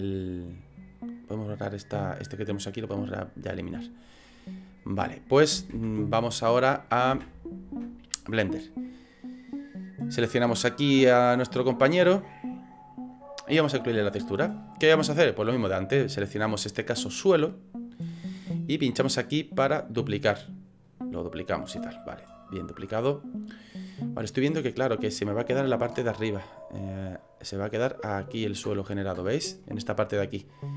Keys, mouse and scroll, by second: 8.9 middle click, 9.7 right click, 10.5 middle click, 12.0 middle click, 15.7 click, 20.8 click, 24.0 middle click, 26.5 click, 27.6 click, 29.7 middle click.